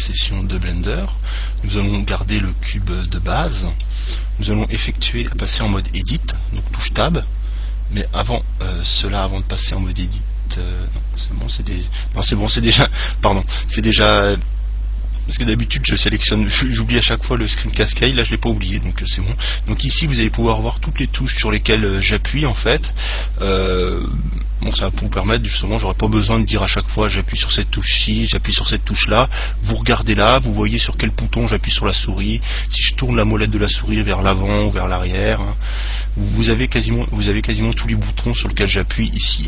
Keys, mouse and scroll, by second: 1.0-5.2 middle drag, 7.5-9.8 middle drag, 33.1-35.8 middle drag, 35.5-35.9 scroll up 1.